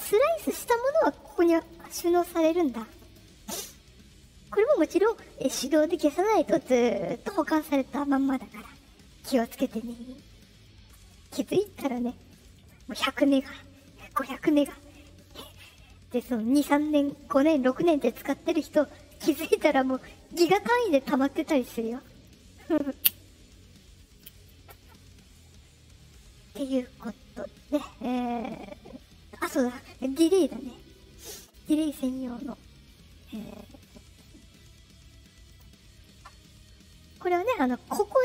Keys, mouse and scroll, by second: 1.1 click, 1.3 click, 1.5 click, 1.6 click, 2.3 click, 2.5 click, 2.7 click, 2.8 click, 3.0 click, 9.7 click, 29.4 click, 31.4 click, 35.4 click, 37.0 click.